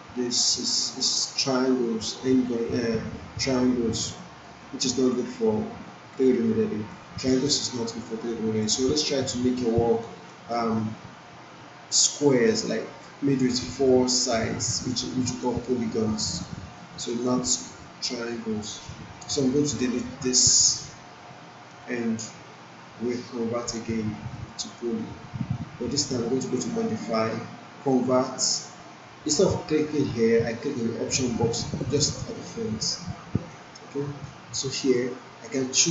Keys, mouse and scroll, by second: 4.3 alt+right click, 4.6-5.2 alt+drag, 7.2 alt+middle click, 7.6-9.4 alt+drag, 9.6-10.2 alt+right click, 10.3-10.9 alt+middle click, 11.1-12.5 alt+drag, 12.6-13.6 alt+drag, 14.6-15.5 alt+drag, 16.0-16.7 alt+middle click, 16.8 alt+right click, 17.2-17.8 alt+drag, 24.3 click, 31.8-35.0 drag.